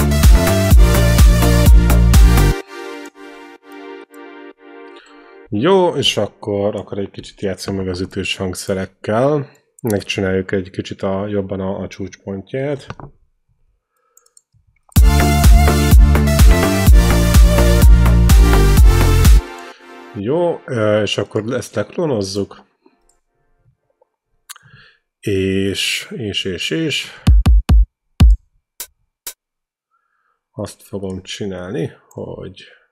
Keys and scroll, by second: 2.3 space, 7.4 Delete, 10.2 ctrl+b, 12.3 ctrl+z, 13.0 space, 17.7 ctrl+z, 19.2 space, 24.1 alt+Tab, 25.0 Tab, 27.1 q.